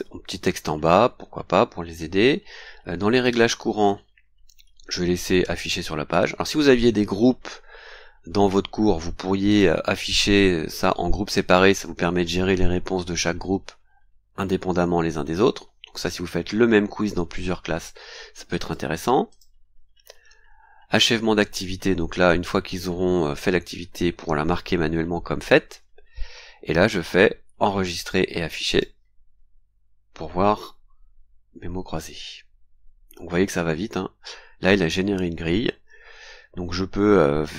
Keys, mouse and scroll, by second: 1.0 scroll down 2, 1.3 scroll up 2, 2.1 scroll down 2, 3.2 click, 3.9 scroll down 2, 9.5 click, 18.6 click, 19.3 click, 19.7-20.1 scroll down 2, 21.0 click, 28.7 click, 33.2-33.5 scroll down 2, 33.9 scroll down 2, 34.7 scroll down 2.